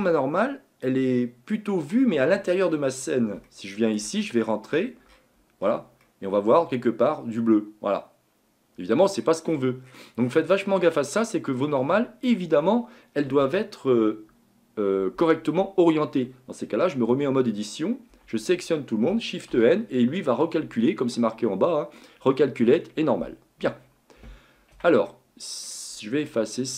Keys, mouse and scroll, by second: 1.2-2.4 scroll up 1, 2.4-3.0 scroll up 8, 3.0-3.4 scroll down 4, 3.4 shift+scroll up 1, 3.5 shift+middle click, 4.0 scroll down 1, 4.2-5.8 scroll up 33, 6.0-9.0 middle drag, 9.5-10.9 scroll down 34, 10.9 middle click, 11.6 scroll down 1, 11.8-12.3 scroll up 7, 12.3-12.7 scroll down 1, 12.7-17.1 shift+middle drag, 17.1 Tab, 18.1 a, 18.4 a, 19.5 shift+n, 24.7 Tab, 25.1-26.7 middle drag.